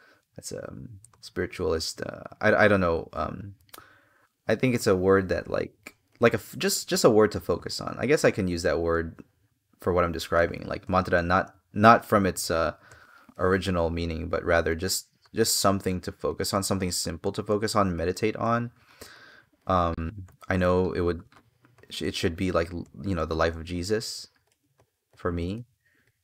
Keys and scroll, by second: 4.5 space, 12.6 space, 17.7 space, 25.3 space.